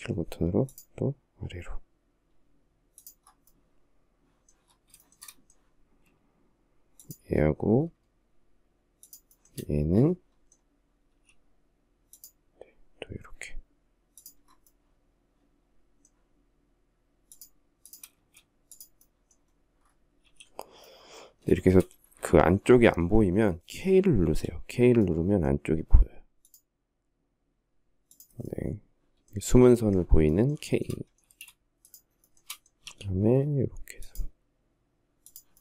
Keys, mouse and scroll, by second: 4.3 shift+middle click, 5.2 space, 8.2 shift+click, 8.5 shift+middle click, 10.3 s, 17.4 space, 19.5 s, 20.8 shift+middle click, 23.4 k, 30.0 shift+middle click, 30.5 space, 31.4 shift+middle click, 31.6 shift+double middle click.